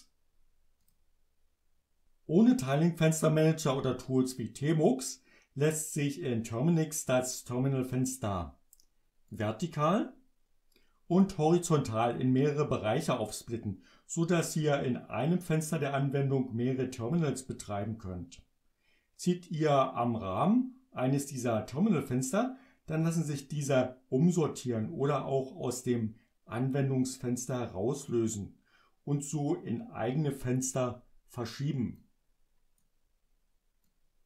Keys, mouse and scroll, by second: 0.9 click, 9.3 click, 11.1 click, 32.0-33.0 drag, 33.9-34.2 drag.